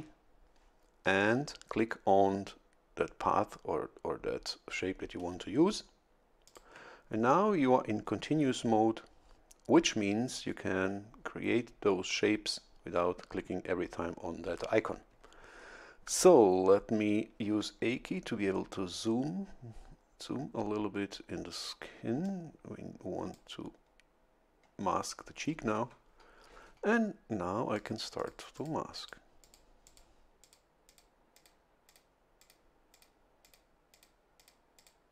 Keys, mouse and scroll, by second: 6.5 ctrl+click, 17.4 a, 17.8-18.5 scroll up 2, 22.2-23.5 drag, 23.7-24.0 scroll down 1, 27.8 click, 28.2 click, 28.6 click, 29.0 click, 29.4 click, 29.9 click, 30.4 click, 30.9 click, 31.4 click, 31.9 click, 32.4 click, 32.9 click, 34.1 click, 34.8 click.